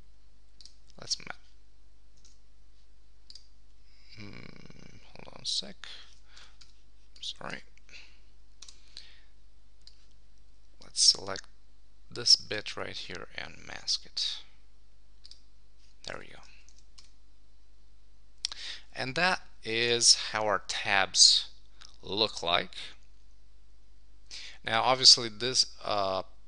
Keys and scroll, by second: 2.3 super+z, 6.2 super+d, 16.7 super+1, 19.8 Tab.